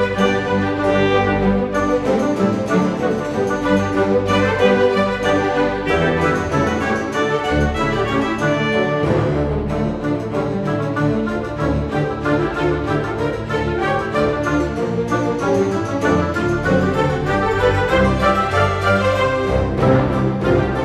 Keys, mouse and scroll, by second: 0.1-1.7 drag, 2.0-2.5 scroll down 2, 2.9 s, 3.9-4.3 drag, 5.1 click, 5.5-6.0 scroll up 3, 6.2 s, 7.1-8.4 drag, 9.5 s, 10.9 click, 12.3 click, 12.9-13.9 drag, 14.4-14.7 scroll down 2, 14.7-15.2 scroll up 2, 15.6 s, 16.7 click, 17.3 click, 18.3-18.7 scroll up 1, 18.7 click, 19.4-20.8 drag.